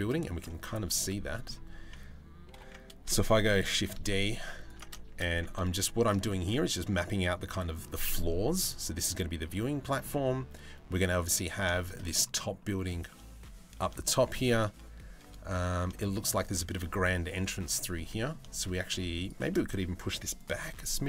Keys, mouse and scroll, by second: 0.1 middle click, 0.4 3, 0.6 click, 0.9 shift+middle click, 2.1 ctrl+l, 3.1 shift+d, 4.7 shift+d, 5.9-7.3 middle drag, 9.4 middle click, 9.9 Tab, 11.3 shift+middle drag, 13.6-13.9 shift+middle drag, 15.6 shift+middle drag, 17.6-17.9 middle drag.